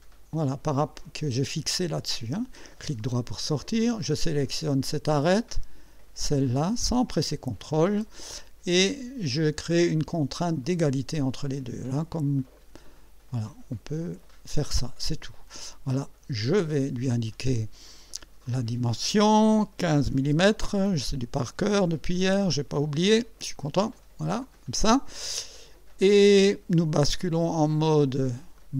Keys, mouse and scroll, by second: 3.0 right click, 4.3 click, 6.7 click, 10.6 click, 12.6-15.3 drag, 16.4 click, 18.5 click, 19.6-20.6 typing, 22.8-24.8 drag, 28.6 click.